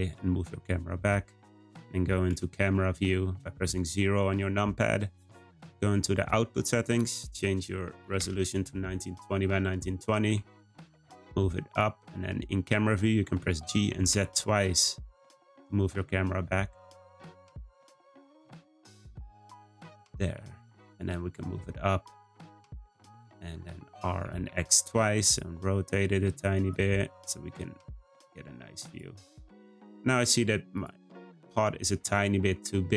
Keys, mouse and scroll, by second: 2.3 `, 4.1-6.1 scroll down 5, 6.1 click, 6.8-9.8 drag, 10.3 g, 12.4-12.7 scroll up 1, 13.5 g, 20.2 g, 23.9 r, 26.8 g, 29.3-30.7 scroll up 3, 30.7 click, 31.9 Tab, 32.7 a.